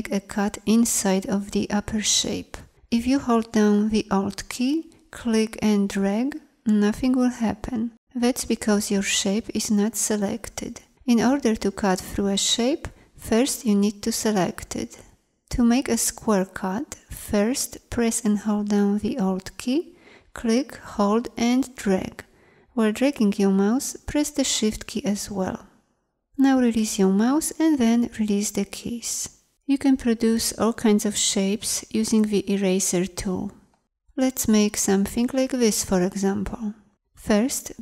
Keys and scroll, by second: 13.3 v.